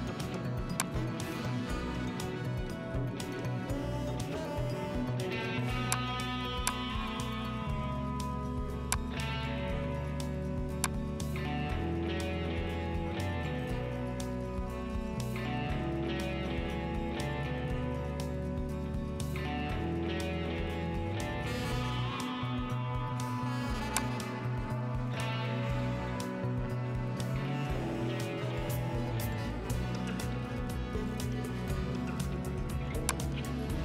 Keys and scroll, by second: 30.4 F10.